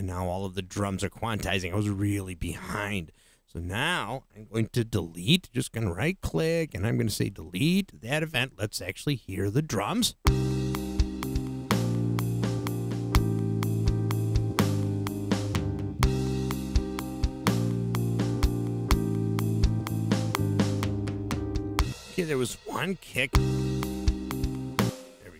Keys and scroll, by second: 9.9 space, 21.8 space, 23.1 space, 24.8 space.